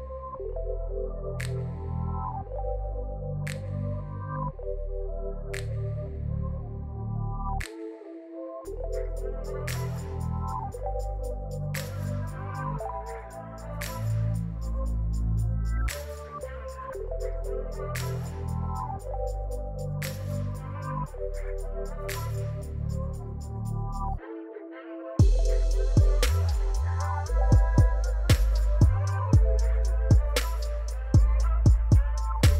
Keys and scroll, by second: 0.6 ctrl+r, 1.8 Tab, 14.6 shift+z, 20.1 m, 21.9 l, 22.4 p, 25.9 7, 27.2 shift+d, 29.2 shift+d, 32.0 shift+d.